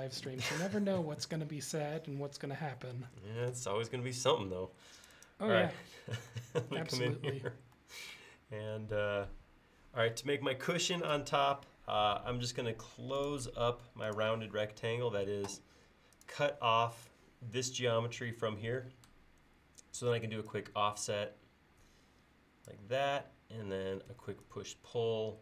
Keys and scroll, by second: 12.2 l, 20.0 f, 24.2 p.